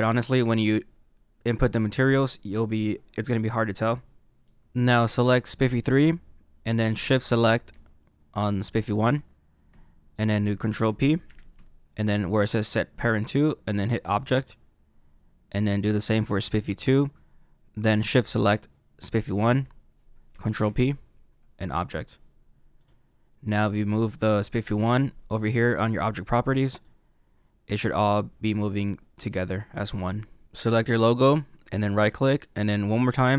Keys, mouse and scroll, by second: 2.5-3.9 scroll down 2, 3.9 middle click, 5.6-8.7 drag, 11.2 ctrl+p, 16.4 click, 19.1 shift+click, 20.6 ctrl+p, 22.7 click, 23.4 click, 25.7 click, 26.8 click, 30.5 click, 31.8 right click.